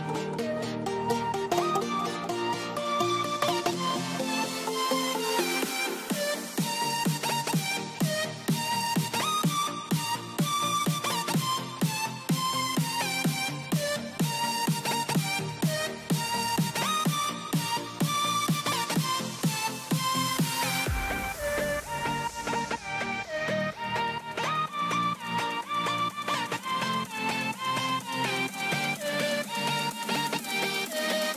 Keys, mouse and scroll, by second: 0.5 click, 1.2 click, 6.4 click, 7.3 l, 10.0 KP_Add, 11.0 click, 13.0 click, 13.8 r, 14.2 click, 18.3 Delete, 18.7 click, 19.0 Delete, 19.6 click, 20.0 Delete, 20.4 middle click, 21.1 click, 22.4 middle click, 23.0 click, 24.5 shift+click, 27.7 click, 29.5 right click, 30.2 click.